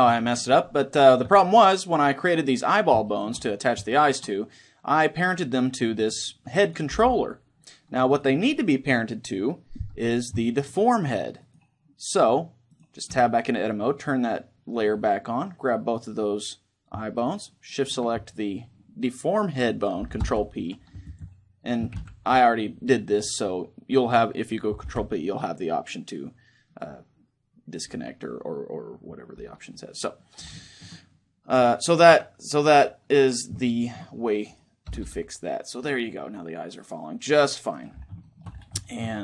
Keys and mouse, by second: 6.4-10.0 right drag, 6.7 r, 10.2-11.2 drag, 11.2-14.9 right drag, 12.8 Tab, 14.9-17.3 middle drag, 16.9-19.7 right drag, 19.9 ctrl+p, 21.7 ctrl+z, 22.9-28.3 middle drag, 24.6 ctrl+p, 29.4-31.9 middle drag, 31.9 Tab, 32.5-33.6 right drag, 34.6 r, 37.6 right click, 37.9-39.2 middle drag.